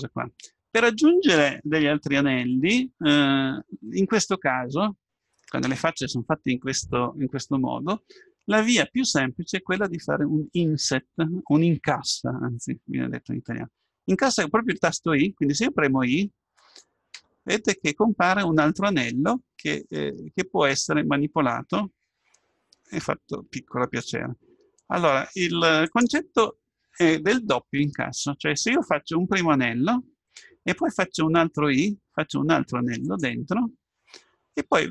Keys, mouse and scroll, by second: 17.3 i, 31.5 i.